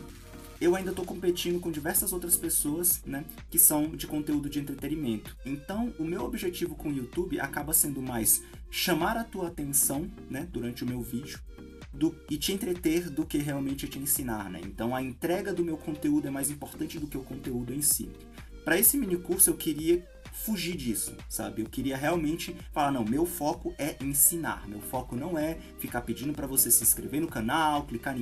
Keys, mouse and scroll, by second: 2.9-6.5 middle drag, 6.5 scroll up 2, 6.7-10.6 middle drag, 8.1 KP_0, 10.6-14.5 drag, 14.5-18.7 middle drag, 14.7 z, 15.0 Tab, 19.1 w, 19.5 Tab, 20.4 click, 20.5 scroll up 2, 20.8 z, 20.9-21.3 middle drag, 21.3-24.3 drag, 24.3-25.7 middle drag, 24.9 scroll up 2, 25.7 click, 26.3 KP_0, 26.5 middle click, 26.5 scroll down 2, 26.6 scroll up 1, 26.7-28.2 shift+middle drag, 26.8 scroll down 1, 26.9 scroll up 1.